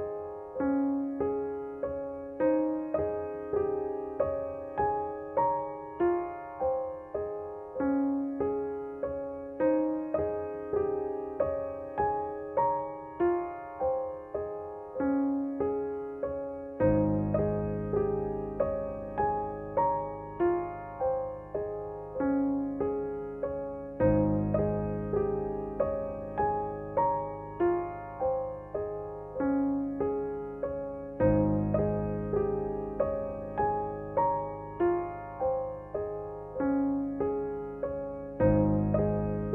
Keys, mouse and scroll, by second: 1.1 ctrl+[, 2.1 space, 2.3 click, 2.6 space, 3.5 ctrl+=, 4.5 ctrl+click, 5.3 space, 5.8 space, 8.0-10.8 drag, 10.8 ctrl+z, 12.3 click, 16.3-17.4 typing, 18.2 ctrl+z, 19.2 click, 19.6 =, 20.3 space, 20.8 click, 20.9 space, 22.4 click, 23.4 ctrl+z, 24.4-30.3 ctrl+drag, 31.4 space, 31.7 click, 31.9 space, 34.9 click, 35.1 space, 37.6 click, 37.8 space.